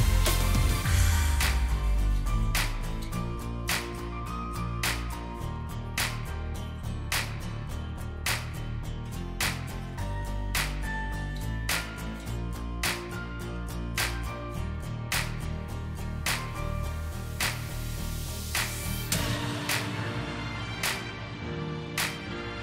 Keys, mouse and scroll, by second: 2.8 shift+click, 4.6 double click, 6.5 alt+shift+click, 8.8 shift+click, 10.8 double click, 21.2-22.6 typing.